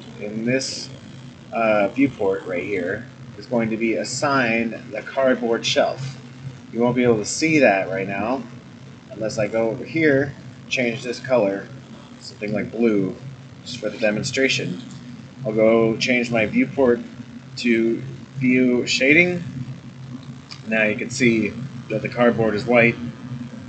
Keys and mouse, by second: 0.6-2.8 middle drag, 6.3 click, 9.4 click, 10.4 click, 14.4 middle click, 19.2 click, 20.0 middle click, 20.5 click, 21.1-23.6 middle drag.